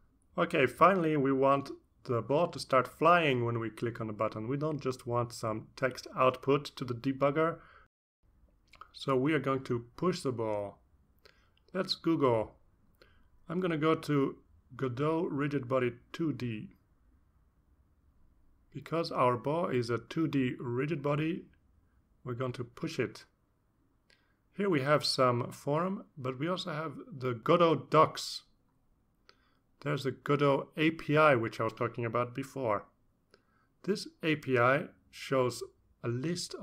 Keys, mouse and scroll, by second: 0.9 click, 1.6 Return, 1.8 Return, 3.3-7.7 typing, 7.8 Left, 8.9 space, 9.0 Right, 9.1 Right, 9.7 Left, 10.2 space, 10.4 ctrl+Right, 10.5 ctrl+Right, 10.9 ctrl+Return, 14.0-19.5 typing, 16.1 Down, 26.1 click, 35.1-36.6 drag.